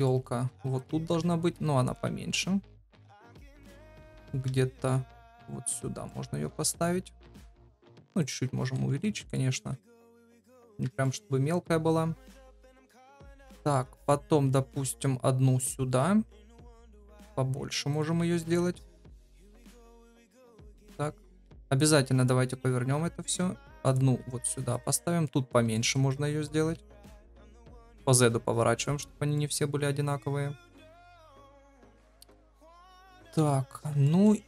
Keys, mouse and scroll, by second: 0.0 shift+click, 0.4 g, 0.9 s, 2.0 g, 4.0 shift+middle click, 4.4 g, 5.3 middle click, 7.4 s, 8.6 KP_1, 9.2 shift+click, 9.6 g, 10.9 shift+click, 12.1 KP_7, 14.0 shift+d, 18.4 KP_1, 19.3 g, 20.6 KP_7, 21.1 r, 23.1 shift+d, 24.1 s, 24.9 middle click, 25.7 shift+middle click, 26.0 middle click, 26.5 g, 27.6 r, 29.3 middle click, 32.4 middle click, 33.3 KP_7, 34.0 shift+middle click.